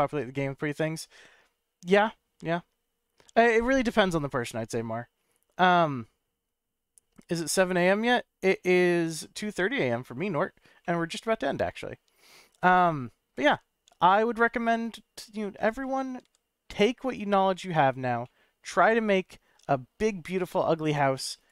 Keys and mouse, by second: 7.4-8.9 middle drag, 10.9-11.6 middle drag, 14.0-14.5 middle drag, 16.2 g, 17.0 right click, 18.2-18.6 shift+middle drag, 19.9-20.4 shift+drag, 21.3 shift+click.